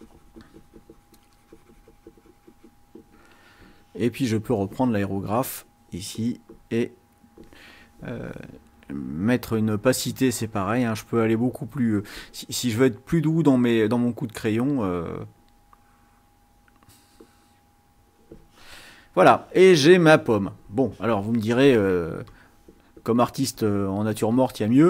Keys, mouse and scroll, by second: 0.0-2.9 drag, 4.3 click, 10.6 click, 11.6 click, 13.0 click, 14.7 click, 15.8 click, 17.2 click, 22.3 click, 23.5-24.8 drag.